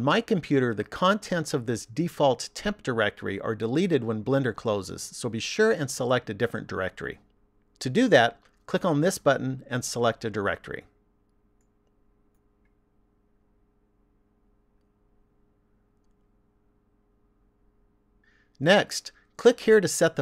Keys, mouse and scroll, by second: 10.5 click, 17.9 click.